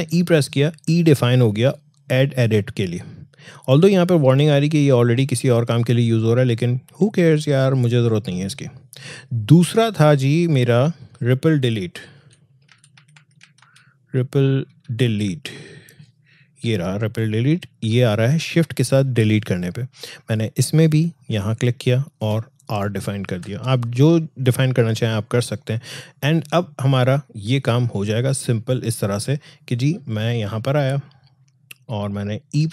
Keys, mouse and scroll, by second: 8.1 click, 12.2-15.5 typing, 18.1 click, 21.3 click, 23.3 r, 27.7 click.